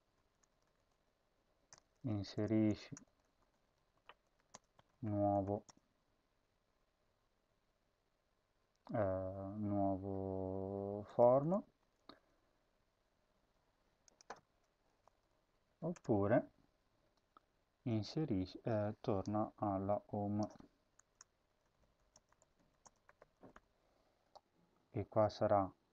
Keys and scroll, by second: 0.0-5.8 typing, 10.7-11.9 typing, 14.8 shift+Home, 15.2 ctrl+c, 15.6 End, 15.9 Return, 16.1 ctrl+v, 20.7-23.9 typing.